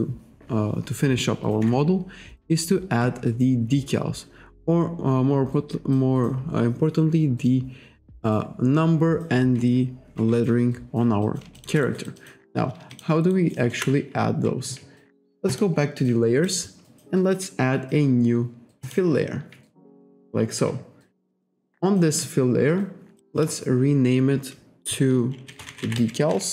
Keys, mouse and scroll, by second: 11.3 alt+click, 11.6 alt+shift+click, 11.9 alt+right click, 13.0 alt+shift+click, 13.4 alt+right click, 13.8 alt+middle click, 15.5 click, 16.5 click, 18.9 click, 23.3 click, 25.3-26.5 typing.